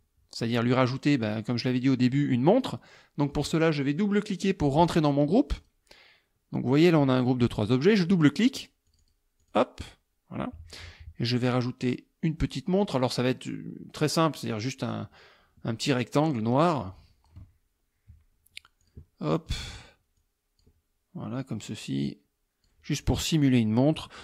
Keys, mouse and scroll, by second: 5.6 click, 8.9 click, 9.4 click, 14.8 click, 16.2-17.5 drag, 18.9 click, 20.2 click, 21.4-22.9 drag.